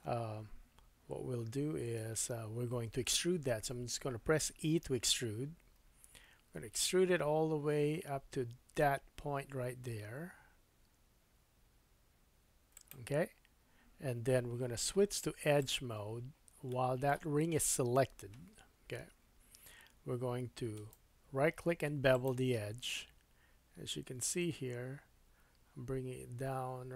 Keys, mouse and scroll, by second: 2.0 KP_1, 5.8 e, 15.6-20.7 drag, 16.7 middle click, 19.0 KP_1, 20.7-26.9 right drag.